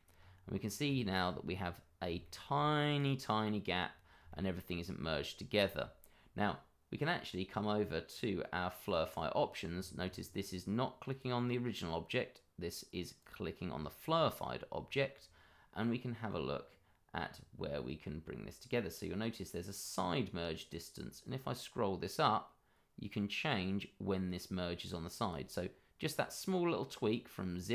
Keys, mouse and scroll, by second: 0.1-0.5 scroll up 1, 0.9 shift+middle click, 1.2-1.6 scroll up 1, 2.2 shift+middle click, 2.5-2.9 shift+scroll up 1, 2.9 click, 3.2 middle click, 3.9-4.3 scroll down 1, 4.3 shift+middle click, 8.1 click, 9.3 scroll down 1, 11.0 click, 13.2 click, 13.7 scroll up 1, 16.4 scroll down 1, 20.9 click.